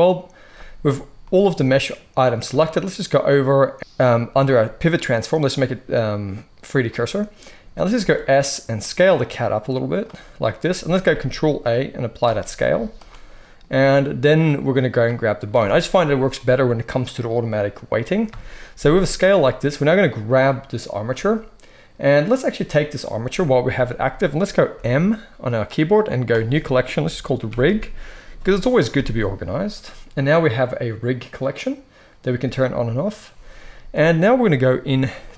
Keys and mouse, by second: 7.9 s, 9.9-13.2 middle drag, 11.0 ctrl+a, 12.6 z, 18.2 KP_3, 23.6 g, 24.6 m, 27.3-32.4 shift+middle drag, 32.4 click, 32.5 middle click, 32.7 click, 32.9-33.9 middle drag, 33.9 click, 34.0-35.2 middle drag, 35.2-35.3 drag.